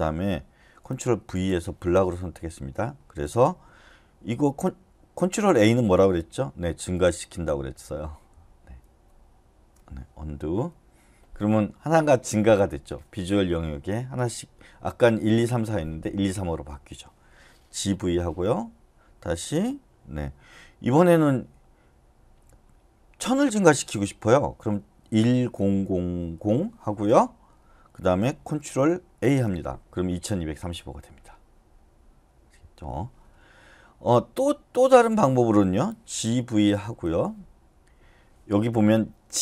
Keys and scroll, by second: 1.2 ctrl+v, 6.9 ctrl+a, 10.5 u, 17.5-18.4 typing, 24.8-25.5 typing, 29.2 ctrl+a, 36.2-36.8 typing.